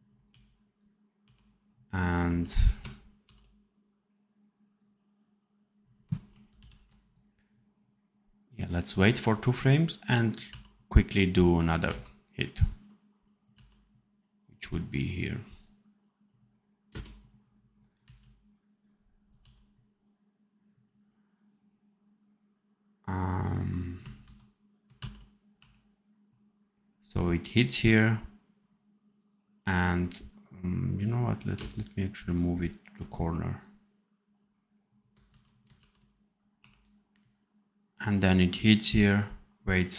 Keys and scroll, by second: 0.2 r, 2.2 v, 3.1 ctrl+b, 6.4 ctrl+shift+l, 10.4 v, 11.7 c, 13.4 v, 16.8 space, 17.9 c, 19.3 v, 24.1 ctrl+c, 24.8 ctrl+v, 31.4 space, 35.2 ctrl+c, 35.7 ctrl+v.